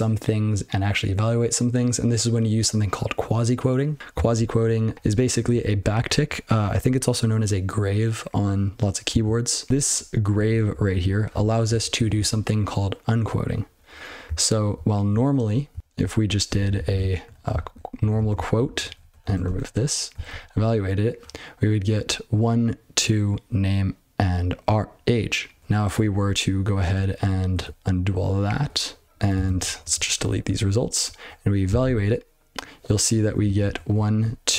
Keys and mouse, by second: 4.3 ctrl+n, 4.9 ctrl+n, 5.4 ctrl+a, 5.6 ctrl+f, 5.9 ctrl+f, 9.7 ctrl+b, 9.8 ctrl+b, 10.3 ctrl+b, 10.7 ctrl+f, 11.0 ctrl+f, 11.2 ctrl+f, 11.6 ctrl+f, 14.3 ctrl+p, 14.7 ctrl+n, 14.9 ctrl+n, 15.1-15.5 ctrl+p, 15.7 ctrl+n, 15.8 ctrl+n, 16.0 ctrl+b, 16.2 ctrl+b, 16.4 ctrl+b, 16.6 ctrl+b, 16.9 ctrl+d, 17.2 ', 17.5 ctrl+f, 18.0 ctrl+b, 18.1 ctrl+d, 18.3 ctrl+f, 18.5 ctrl+f, 18.6 ctrl+f, 18.8 ctrl+f, 19.0 ctrl+f, 19.2 ctrl+d, 19.4 ctrl+e, 20.5 ctrl+c, 26.8 ctrl+/, 27.1 ctrl+/, 27.5 ctrl+/, 28.5 ctrl+/, 29.0 ctrl+n, 29.3 ctrl+space, 29.4 ctrl+n, 29.6 ctrl+n, 29.8 ctrl+n, 29.9 ctrl+w, 30.1 ctrl+p, 30.4 ctrl+p, 30.6 ctrl+p, 31.0 ctrl+f, 31.2 ctrl+f, 32.0 ctrl+c, 33.1 ctrl+n, 33.2 ctrl+n, 33.4 ctrl+n, 33.6 ctrl+n, 33.9 ctrl+f, 34.5 ctrl+f.